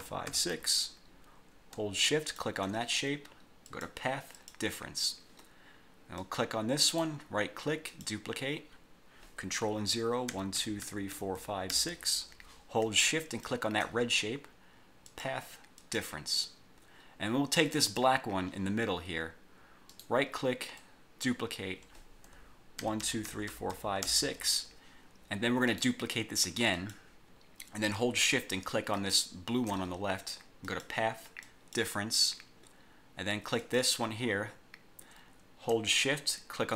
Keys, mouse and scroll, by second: 2.3 shift+click, 3.8 click, 4.5 click, 6.3 click, 7.0 right click, 8.0 click, 10.4 ctrl+0, 13.4 shift+click, 15.2 click, 15.9 click, 17.9 click, 18.6 scroll up 2, 18.9 scroll down 1, 20.1 right click, 20.9 click, 22.9 ctrl+0, 25.8 click, 26.9 click, 29.1 shift+click, 30.8 click, 31.6 click, 33.7 click.